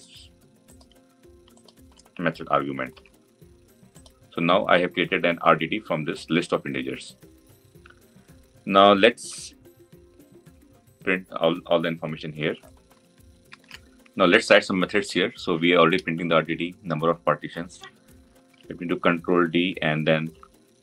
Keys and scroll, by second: 2.8 ctrl+v, 18.4 ctrl+d.